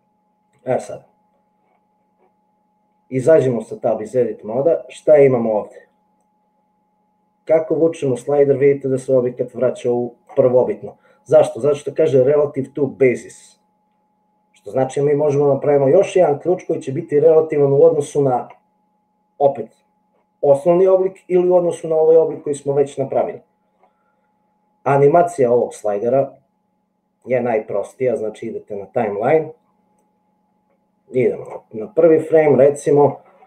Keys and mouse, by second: 1.0 Tab, 6.7-10.4 middle drag, 25.3-27.3 drag, 30.0-31.1 drag, 31.1 middle click.